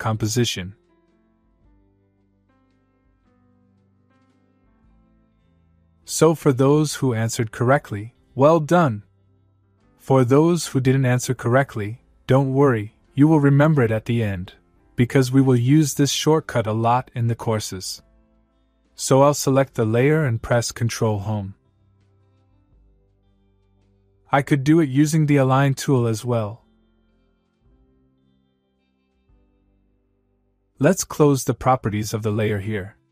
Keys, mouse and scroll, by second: 19.8 click, 22.1 ctrl+Num_Lock, 22.4 ctrl+Home, 26.9 click.